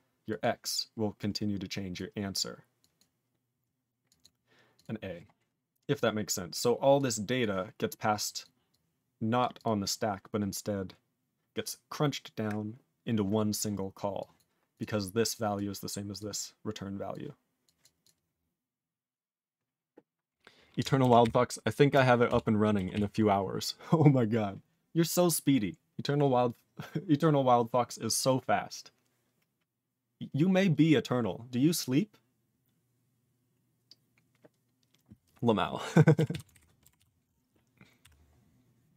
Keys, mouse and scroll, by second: 0.3 click, 0.4 click, 1.2 click, 1.9 click, 2.8 click, 2.9 click, 4.0 click, 4.2 click, 4.8 click, 6.5 click, 6.9 click, 7.4 click, 8.2 click, 8.4 click, 8.7 click, 9.4 click, 9.5 click, 9.6 click, 14.2 click, 14.3 click, 14.7 click, 14.8 click, 15.3 click, 15.5 click, 16.1 click, 17.1 click, 17.6 click, 17.8 click, 18.0 click, 18.0 click, 22.3 ctrl+Return, 22.9 ctrl+s, 36.3 ctrl+s, 36.5 ctrl+alt+b, 36.9 ctrl+s.